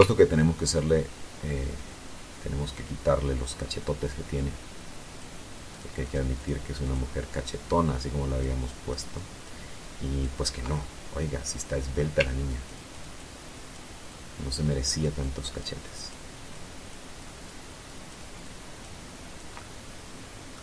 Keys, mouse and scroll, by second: 4.9 ctrl+click, 6.1 ctrl+click, 6.6-8.9 ctrl+drag, 9.0 ctrl+click, 9.9-11.3 ctrl+middle drag, 11.8 ctrl+click, 12.7 ctrl+click, 13.6-15.0 ctrl+drag, 15.5 ctrl+click, 15.7 ctrl+click, 16.4 ctrl+click, 17.0 ctrl+click, 17.7 ctrl+click, 18.3 ctrl+click, 18.8-19.9 ctrl+middle drag.